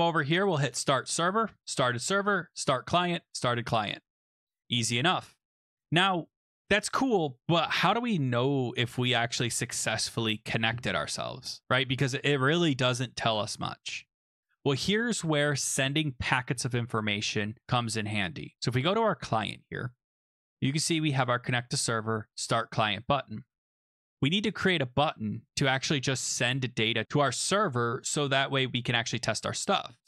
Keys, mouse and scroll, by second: 0.7 click, 1.6 click, 2.5 click, 14.3 click, 15.1 click, 15.2 click, 15.7-16.7 scroll down 5, 19.2 click, 19.9-21.8 scroll down 3, 23.5-24.5 scroll, 23.7 click, 25.0-26.3 scroll, 26.3-26.9 scroll.